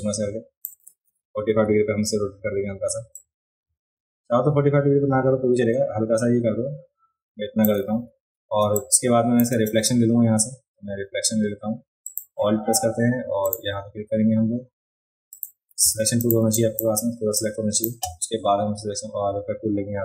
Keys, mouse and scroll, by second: 3.1-7.6 shift+drag, 8.6 space, 8.8 click, 12.0 click, 15.3 click, 16.2 click, 16.5 click, 17.4 click.